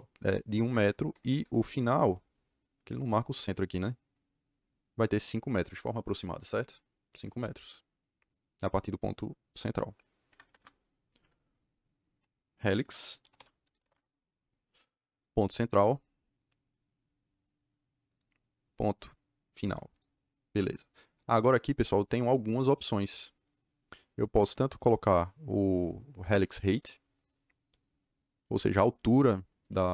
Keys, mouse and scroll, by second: 1.1 KP_Enter, 1.3 KP_Enter, 3.6 click, 10.2 Escape, 10.3 Escape, 12.9-14.2 typing, 15.5 click, 18.0 click, 19.8 click.